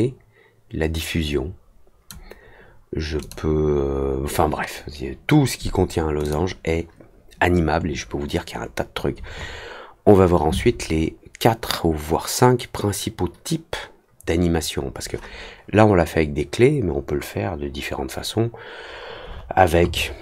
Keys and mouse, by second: 6.2 click.